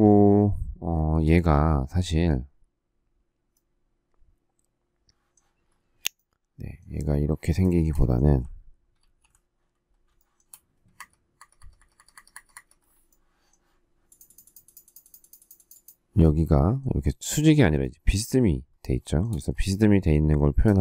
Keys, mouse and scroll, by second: 1.1 space, 7.6 shift+middle click, 8.9 alt+t, 10.1 shift+middle click, 10.9 Escape, 11.3 Escape, 19.0 shift+middle click, 20.5 space, 20.7 Escape.